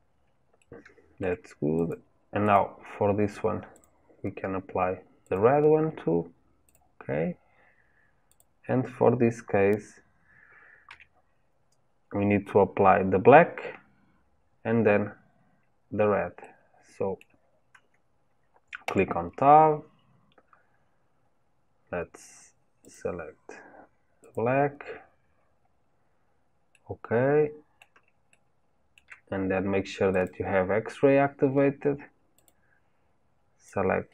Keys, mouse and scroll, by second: 0.6-1.9 shift+middle drag, 1.9 click, 5.3-6.7 drag, 8.4 click, 10.9 KP_3, 16.5-18.9 middle drag, 18.9 Tab, 24.3-25.6 drag, 25.6 scroll up 1, 26.1 scroll up 3, 26.7-30.2 middle drag, 30.2-34.1 drag.